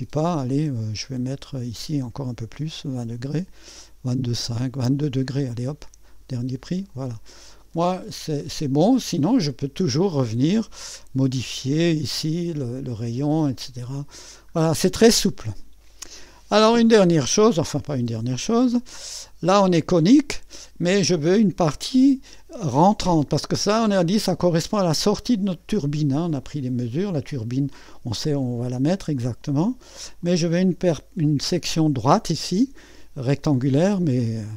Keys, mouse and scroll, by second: 0.3 click, 2.2-4.1 scroll up 1, 4.2-4.8 scroll up 1, 4.8 scroll up 1, 4.9-6.0 scroll down 1, 6.0-7.1 drag, 7.9-9.2 drag, 10.2 click, 13.2-14.3 drag, 15.2 click, 18.1-19.3 drag, 21.3 right click, 26.4 click, 27.8 click, 29.2 click, 30.3 click, 31.3 click.